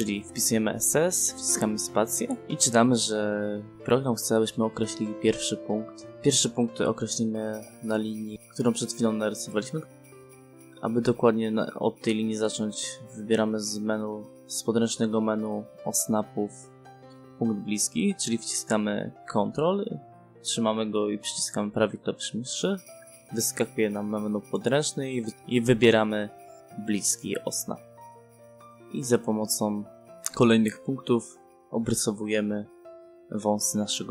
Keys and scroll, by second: 1.7 s, 3.4 space.